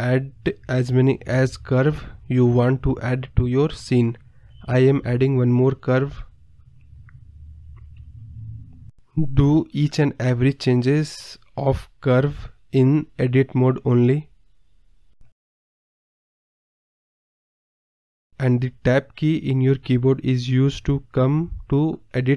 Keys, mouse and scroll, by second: 0.1 scroll down 1, 0.2 scroll up 1, 0.3-1.2 scroll down 4, 2.2-2.8 scroll up 1, 3.0 Tab, 3.2-4.0 scroll down 4, 3.3 middle drag, 4.2 shift+a, 5.8 shift+a, 6.2 scroll down 1, 6.2 scroll up 4, 6.5 KP_7, 7.1 r, 7.7 middle drag, 7.8 scroll down 1, 7.9 middle drag, 8.2 ctrl+z, 8.3 middle click, 8.4 Tab, 8.5 middle click, 8.7 KP_7, 8.9 r, 9.3 middle drag, 9.5 scroll down 2, 9.6 middle click, 10.2-15.4 typing, 11.3 middle drag, 11.4 scroll down 3, 11.6 middle click, 12.1-12.5 scroll down 1, 13.6 scroll up 1, 13.7-14.1 scroll down 4, 13.7 middle drag, 14.8 middle click, 14.9 scroll down 4, 15.1 click, 15.5-15.9 scroll up 3, 15.9 middle click, 16.0-17.0 middle drag, 17.0-20.2 typing, 18.6-19.2 middle drag, 19.6 click, 20.5 middle drag, 20.8 scroll down 3, 20.9 middle click, 21.3 click, 21.7 r, 22.0 middle click.